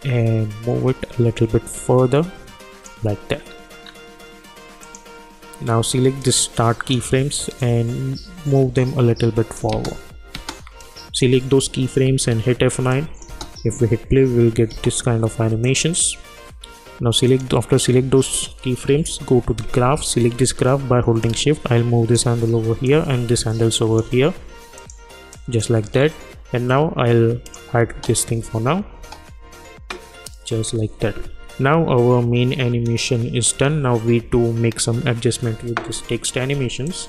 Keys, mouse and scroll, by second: 3.8-4.8 scroll down 1, 4.8-9.7 drag, 9.7 space, 10.8 click, 12.0 F9, 12.9 click, 13.3 space, 15.6-17.3 drag, 18.9 =, 19.6-22.8 drag, 23.1 shift+click, 25.9-27.2 scroll down 1, 27.4 click, 27.9 space, 36.8 click.